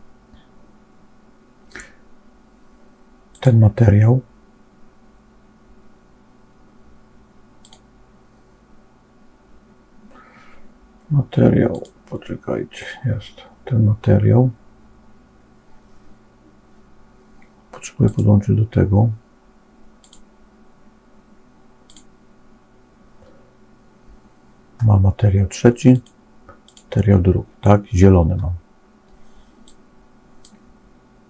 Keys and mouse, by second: 7.5 click, 11.6 click, 17.9 click, 20.0-21.9 drag, 25.9 click, 29.6 click.